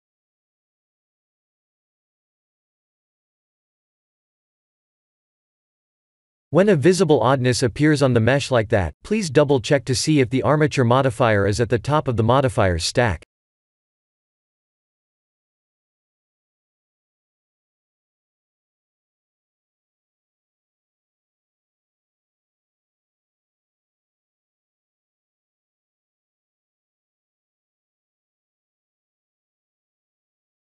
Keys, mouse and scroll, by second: 0.0 middle click, 4.0 ctrl+z, 4.4 ctrl+z, 5.2 Tab, 6.3 middle click, 7.0 click, 8.4 click, 11.0 click, 12.9 middle click, 14.6-15.1 scroll down 3, 15.0 middle click, 16.4 KP_1, 18.4 shift+middle click, 22.0 scroll down 3, 22.8 click, 23.4 g, 26.1 s, 28.9 r, 30.4 g.